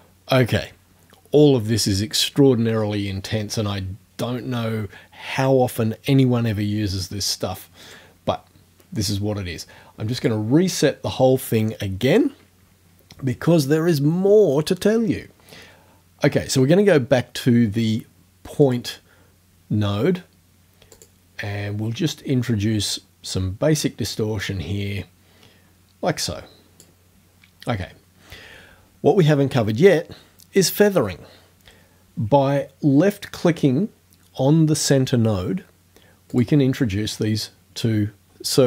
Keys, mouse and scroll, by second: 7.9 right click, 10.2 click, 18.6 click, 21.0 click, 24.5-27.0 drag, 36.3 click.